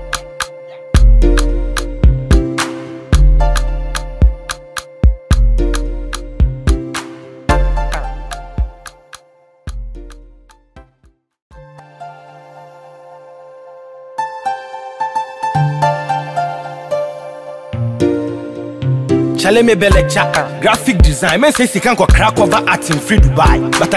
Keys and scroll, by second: 5.7 ctrl+=.